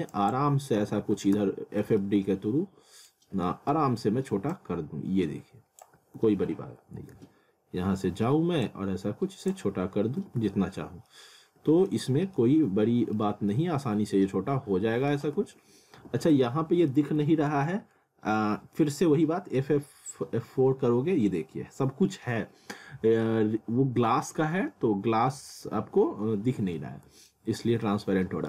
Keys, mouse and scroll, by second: 0.8 alt+w, 1.4 z, 2.0 alt+middle click, 3.1 scroll down 1, 3.4 alt+middle click, 4.5 click, 6.2 alt+w, 7.2 z, 7.5 scroll up 1, 8.7 click, 10.2 w, 11.1 alt+middle click, 11.7-12.1 scroll up 1, 12.4 alt+middle click, 13.2 scroll down 1, 13.5 alt+middle click, 15.2 alt+w, 16.9 alt+middle click, 17.6 alt+middle click, 18.1 scroll up 1, 18.4 alt+middle click, 20.1 F4, 23.9 F4, 24.7 scroll up 1, 25.7 F4, 26.4 scroll down 1, 26.8 middle click, 27.3 scroll down 1, 27.8 middle click.